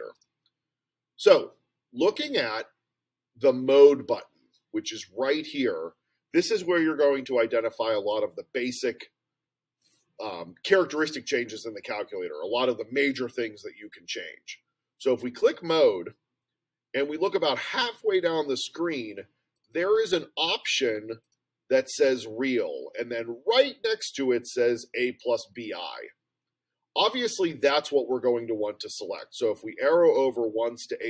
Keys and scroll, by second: 19.5 Down, 19.8 Down, 20.0 Down, 20.2 Down, 20.9 Down, 21.2 Down, 30.1 Right.